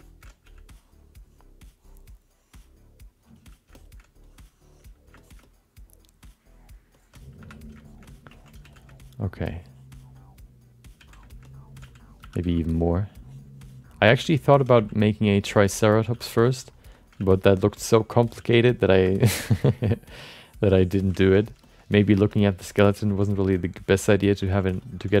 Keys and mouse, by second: 0.0 alt+shift+middle click, 0.4 f, 0.7-2.7 drag, 3.2 click, 3.7 alt+shift+middle click, 4.3 click, 5.2 middle click, 5.4-6.7 alt+middle drag, 6.9 middle click, 7.4 5, 7.8 alt+shift+middle click, 8.0 middle click, 8.3 ctrl+middle click, 8.6 f, 8.9 alt+middle click, 9.5 alt+middle click, 10.4 click, 11.0 f, 11.4 alt+middle click, 11.8 f, 12.2 2, 12.4 f, 12.8-13.8 drag, 14.1 shift+middle click, 14.2 middle click, 14.5 ctrl+alt+middle click, 14.7 f, 15.0 click, 15.6 shift+middle click, 15.8 alt+middle click, 16.1 f, 16.4 click, 16.9 shift+middle click, 17.2 f, 17.4 click, 17.7 shift+middle click, 18.0 middle click, 18.4 f, 18.8 click, 19.0 shift+middle click, 19.2 middle click, 19.5 f, 19.8 click, 20.3 click, 20.7 click, 21.2 ctrl+alt+middle click, 21.6 alt+shift+middle click, 21.8 alt+middle click, 22.3 alt+shift+middle click, 22.5 alt+middle click, 23.0 ctrl+alt+middle click, 23.3 alt+shift+middle click, 23.6 alt+middle click, 23.9 shift+middle click, 24.1 alt+middle click, 24.5 ctrl+middle click, 24.8 alt+shift+middle click, 25.1 f.